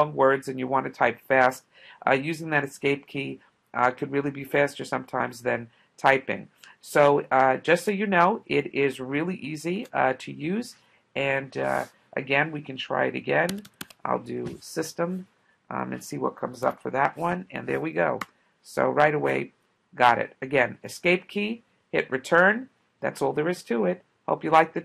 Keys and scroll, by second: 9.8 space, 13.3-14.5 typing, 18.2 Return.